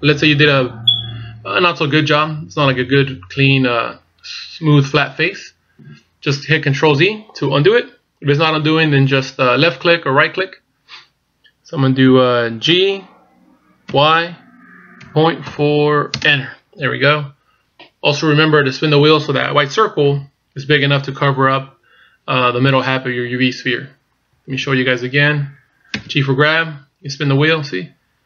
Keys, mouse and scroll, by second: 12.7 g, 21.0-21.7 scroll down 3, 24.6 ctrl+z, 25.9 g.